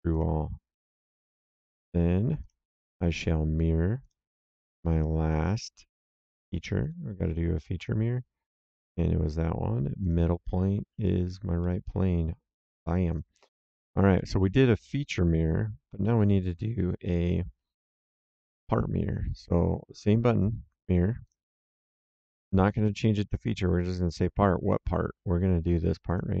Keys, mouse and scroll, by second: 0.1 click, 1.5 click, 2.9 middle click, 4.0 click, 6.3 click, 10.0 click, 11.5 middle click, 13.0 click, 14.1 middle click, 14.9 right click, 18.0 middle click, 21.2 click, 26.0 click.